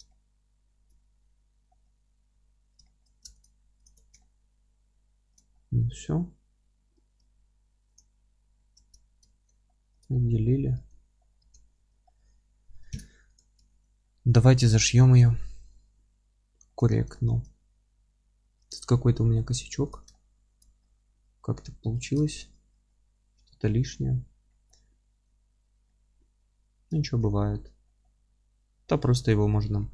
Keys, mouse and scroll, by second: 1.0-1.7 scroll up 2, 2.3 F3, 3.4 ctrl+click, 4.2-5.5 alt+middle drag, 8.0 p, 8.5 scroll down 1, 8.8 Tab, 9.3 alt+q, 9.7 alt+middle click, 10.4 scroll up 1, 10.8 Tab, 10.8-13.4 middle drag, 11.4 Tab, 11.8 F3, 12.9 alt+z, 13.4 click, 13.7 alt+q, 14.0-19.9 alt+middle drag, 14.5 Tab, 14.8-15.3 scroll up 1, 16.9 scroll up 1, 17.6 Tab, 18.8 scroll up 1, 19.3 scroll down 1, 19.5 1, 19.9 click, 20.1-22.0 alt+middle drag, 21.1 g, 22.0 click, 22.3-29.9 alt+middle drag, 24.2-24.5 scroll down 1, 25.2-25.5 scroll up 1, 25.5-25.9 scroll down 1, 26.2-26.6 scroll up 1, 27.3-27.9 scroll down 1, 29.7 g.